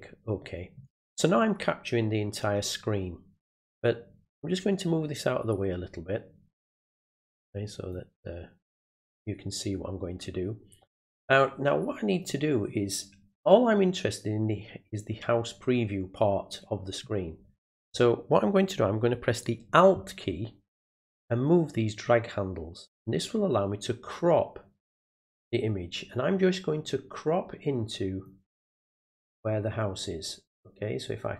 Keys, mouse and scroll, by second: 4.7-7.9 drag, 9.7-10.8 drag, 11.3 click, 21.3-25.4 alt+drag, 26.8-28.2 alt+drag, 31.0-31.3 alt+drag.